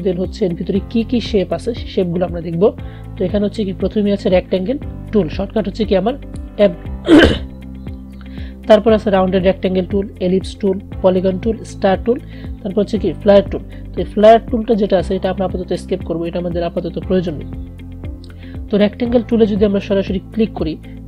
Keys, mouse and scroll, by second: 20.4-21.0 drag.